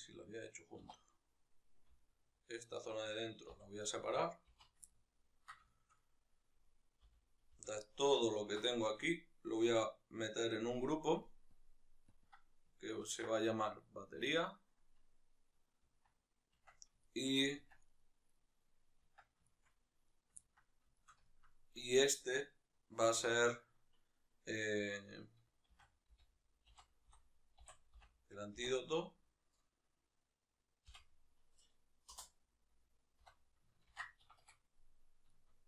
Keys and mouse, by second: 1.7 alt+right click, 3.3 v, 3.6 right click, 4.3 z, 4.6-6.4 ctrl+middle drag, 6.4 right click, 6.8 l, 8.1-11.4 ctrl+middle drag, 11.4-11.9 drag, 12.0-13.6 drag, 14.0-16.8 drag, 15.8 Tab, 16.8-17.6 shift+middle drag, 17.4 Tab, 17.6 right click, 18.1-19.8 middle drag, 19.0 Tab, 19.8 right click, 20.1-21.0 ctrl+middle drag, 34.5 middle click.